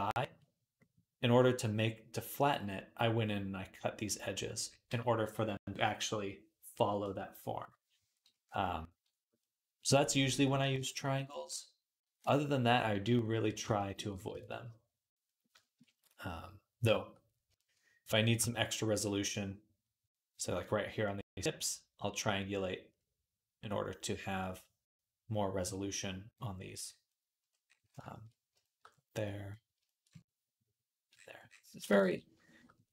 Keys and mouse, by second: 14.2 ctrl+s, 14.9-27.0 drag, 14.9-17.6 right drag, 17.9-30.0 shift+middle drag, 17.9-27.0 shift+right drag, 31.8 ctrl+s, 32.5-32.9 drag, 32.5-32.9 middle drag, 32.5-32.9 right drag.